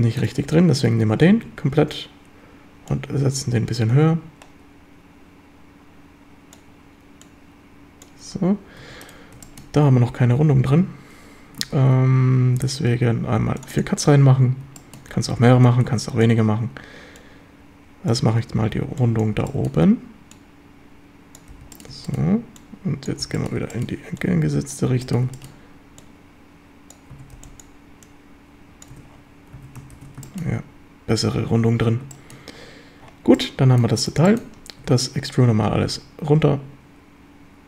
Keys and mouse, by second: 0.9 Tab, 1.3 a, 2.9-6.5 drag, 7.3 click, 8.8 Tab, 9.5 shift+click, 10.0 Tab, 10.6 a, 11.8 ctrl+r, 13.8 click, 14.8 shift+click, 15.3 a, 15.6 b, 17.2 click, 18.8 b, 19.4 b, 20.4 click, 22.0 shift+b, 22.1 shift+middle click, 22.6 click, 23.3 b, 23.8 shift+middle click, 24.2 click, 24.9 b, 25.4 shift+middle click, 26.0 click, 27.2 a, 27.4 b, 28.1 click, 29.0 Tab, 29.6 a, 30.0 ctrl+s, 30.3 shift+drag, 32.1 shift+middle drag, 33.4-33.9 middle drag, 34.3 shift+middle drag, 34.8 Tab, 35.4 a, 35.8 a, 36.4 e.